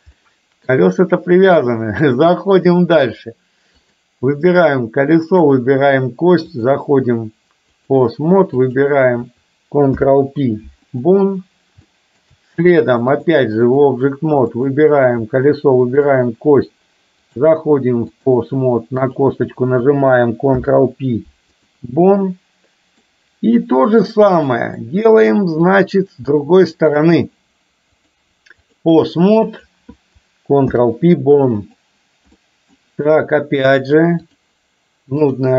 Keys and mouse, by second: 0.4 middle click, 2.7 click, 3.9 click, 6.6-8.0 drag, 8.7 click, 10.0 ctrl+p, 11.9 shift+middle click, 13.2 click, 14.6 click, 16.0 shift+click, 17.5 click, 20.6 ctrl+p, 22.1-23.1 middle drag, 23.9-24.6 drag, 24.9 middle drag, 26.9 shift+click, 28.1-29.0 drag, 30.7 ctrl+p, 32.4 middle click, 34.0-34.5 drag, 35.4 click.